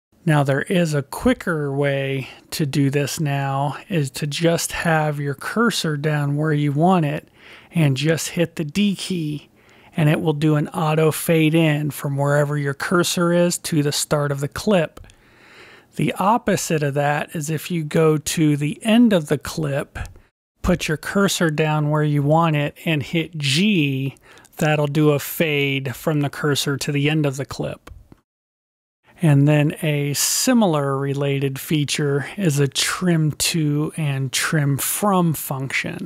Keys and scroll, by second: 9.0 d, 9.7 d, 23.3 g.